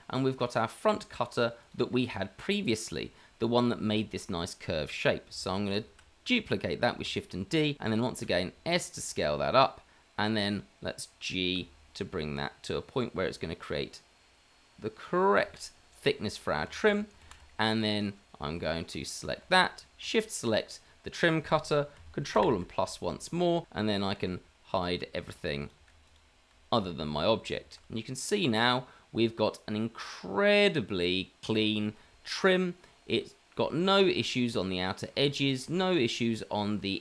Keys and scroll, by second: 6.0 shift+d, 8.2 s, 11.6 g, 16.9 shift+z, 17.3 shift+z, 22.8 KP_Add, 24.2 h, 25.0 h, 25.8 h, 26.5 h, 27.8 h.